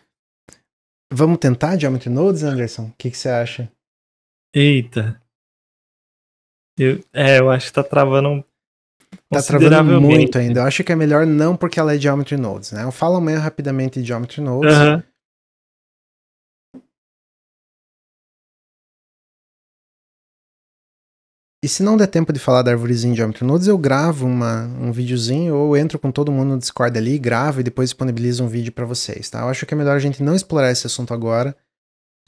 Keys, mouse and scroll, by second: 0.3 click, 2.1 x.